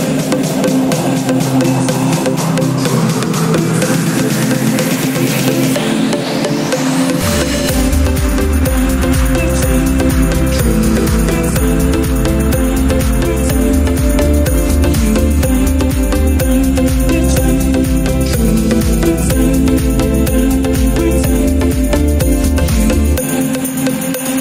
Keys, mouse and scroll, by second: 3.6 click, 4.7 click, 6.2-9.9 drag, 15.7 click, 17.3 shift+d, 20.8 right click, 23.5 click.